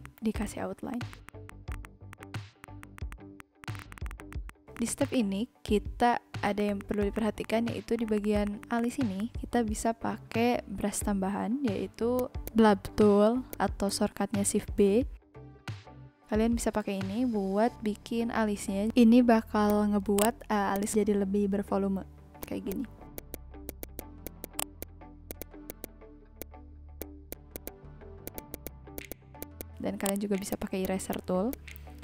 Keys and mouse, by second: 0.4 click, 0.9 click, 1.1 click, 1.2 ctrl+z, 1.3 click, 1.4 click, 1.7 click, 2.0-4.7 typing, 2.1 click, 2.3 click, 2.6 click, 2.8 click, 3.1 click, 3.4 click, 3.6 click, 4.3 click, 4.5 click, 4.7 click, 4.9 ctrl+z, 5.0 click, 6.2-7.8 typing, 6.3 click, 6.4 click, 6.6 click, 6.7 click, 6.8 click, 7.2 ctrl+z, 7.4 click, 7.5 click, 7.9 click, 8.4 click, 8.6 click, 8.8 click, 8.9 shift+b, 9.2 click, 12.1 click, 16.7 click, 19.6 click, 20.1 click, 20.7 click, 22.4 click, 23.1 click, 25.3 click, 26.3 v, 26.4 click, 27.9 n, 28.5 click, 28.9 click, 29.3 v, 29.4 click, 30.0 click.